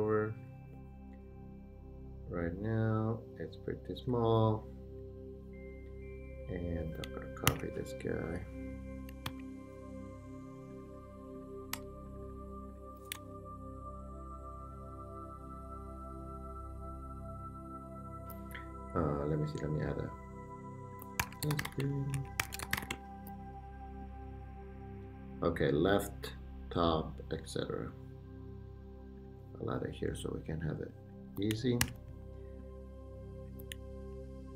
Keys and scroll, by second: 7.5 super+c, 9.3 super+v, 11.7 BackSpace, 13.5 shift+super+g, 21.0-22.9 typing, 22.4 super+t, 31.8 super+d, 34.1 super+d.